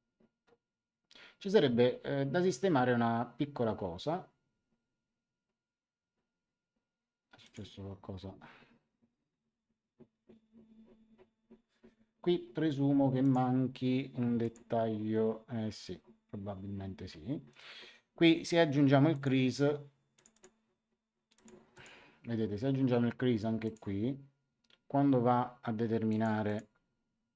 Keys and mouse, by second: 7.4 click, 13.2 click, 14.4 click, 19.1 click, 20.1 click, 23.6 click, 26.0 click.